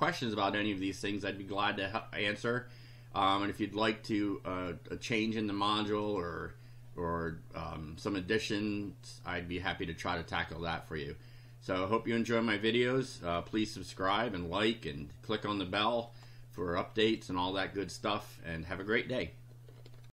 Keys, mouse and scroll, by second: 6.0 click, 7.3 click, 13.9 click, 16.1 click, 17.0 click.